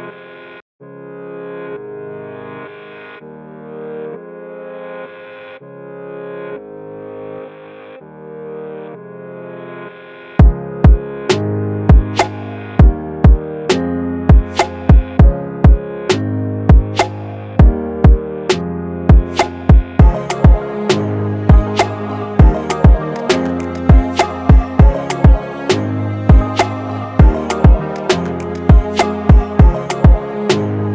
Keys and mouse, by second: 1.7-5.6 alt+shift+drag, 8.9 click, 10.8 1, 12.6 Return, 14.5 click, 16.9-19.7 drag, 19.7-20.8 typing, 21.0 Return, 23.8 click, 27.6 click, 29.4 typing, 30.0 Return.